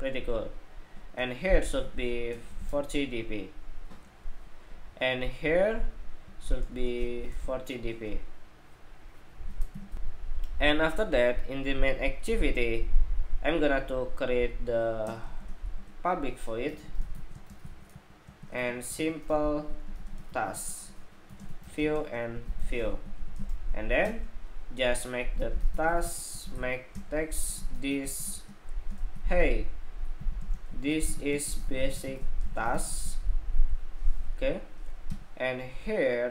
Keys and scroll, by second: 9.6 shift+super+2.